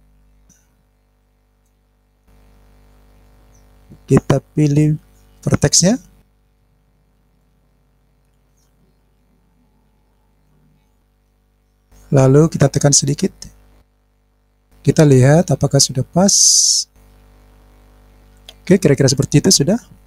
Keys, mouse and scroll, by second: 2.3 click, 4.4 click, 6.6 shift+click, 7.1-7.5 scroll down 1, 7.6 scroll down 1, 7.6-9.5 drag, 10.3 shift+click, 10.9 shift+click, 11.4 scroll down 2, 12.8 click, 13.9 click, 15.1-16.3 drag, 16.9-18.1 scroll up 5, 18.1-19.1 scroll down 4, 19.1 click.